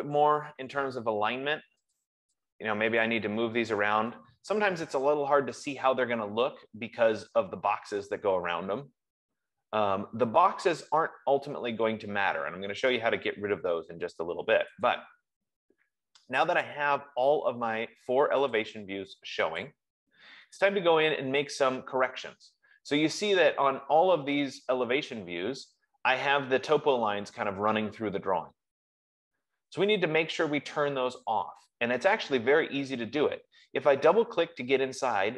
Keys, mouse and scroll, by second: 0.3-1.2 typing, 2.4 click, 3.3 click, 3.8-4.5 typing, 15.2 click, 18.9 click, 19.9 click, 23.5 middle click, 27.7-28.2 scroll, 33.7 F15.